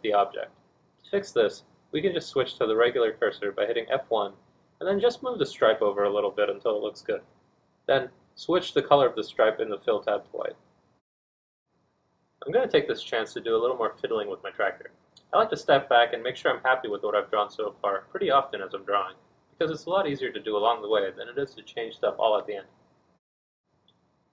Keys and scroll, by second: 16.6 4, 20.7 g.